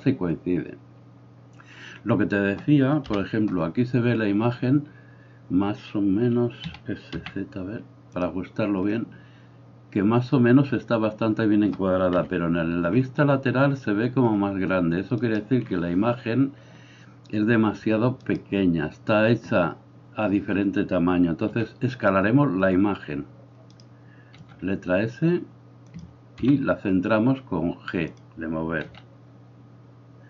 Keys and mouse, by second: 3.1 KP_1, 6.7 s, 12.2 KP_3, 15.3-18.4 right drag, 18.4-30.2 middle drag, 21.6 s, 24.4 s, 26.4 g, 28.9 s.